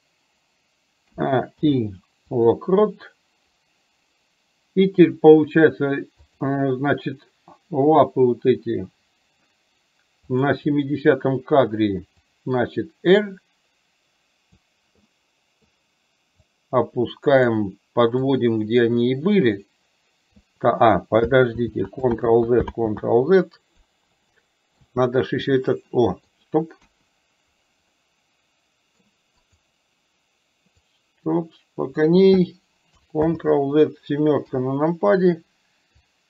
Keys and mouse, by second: 5.1 click, 6.4 click, 10.4 click, 12.2 click, 12.6-14.6 drag, 15.1 middle click, 16.5-17.5 drag, 18.4-20.5 drag, 21.7 ctrl+z, 23.0 ctrl+z, 24.4-24.9 middle drag, 25.9 middle click, 26.9 KP_1, 28.0-29.0 middle drag, 29.5 click, 30.9-32.1 drag, 33.4 ctrl+z, 34.5 KP_7, 36.1 click.